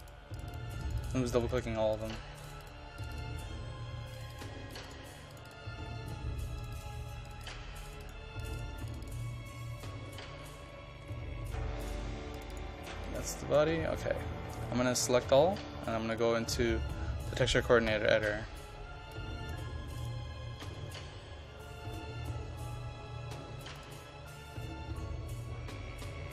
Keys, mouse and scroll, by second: 3.6-4.2 scroll down 1, 4.2 click, 5.9 scroll down 1, 6.7-9.1 drag, 9.5-11.1 scroll down 1, 11.1 scroll up 1, 11.9 click, 14.5 ctrl+a, 16.2 click, 20.7-22.0 scroll up 1, 23.8 click.